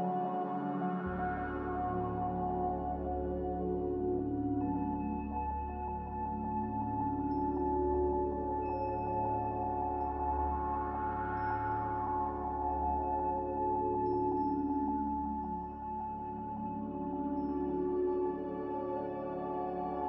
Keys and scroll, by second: 5.2 g, 11.2 typing, 11.4 Return, 17.9 z.